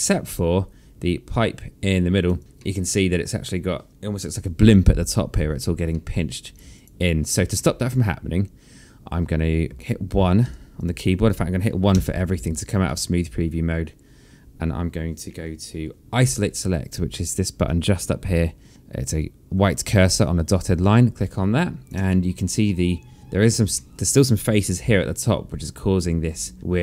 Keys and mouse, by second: 0.3 alt+middle click, 2.5 alt+click, 3.1 alt+middle click, 5.3 alt+middle click, 6.4 alt+middle click, 6.8 alt+click, 8.1 alt+middle click, 9.7 alt+click, 11.0 1, 11.3 click, 12.4 1, 13.4 click, 21.0 click, 21.8 alt+click, 22.6 alt+middle click, 24.2 alt+middle click, 25.3 3.